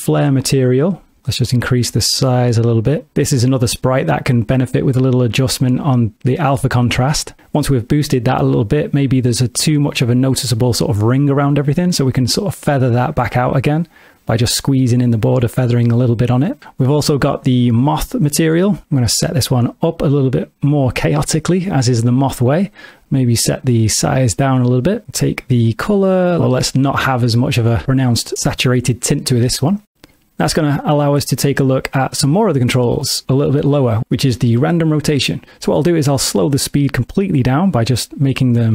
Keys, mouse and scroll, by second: 1.5 click, 4.6 click, 12.9 click, 17.5 click, 19.7 click, 22.7 click, 31.9 middle click, 36.6 click.